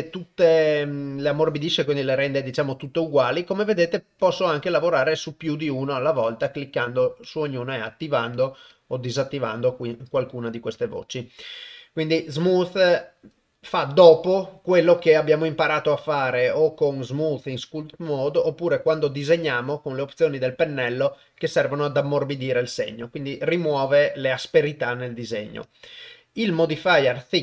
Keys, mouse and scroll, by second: 25.9-27.4 drag.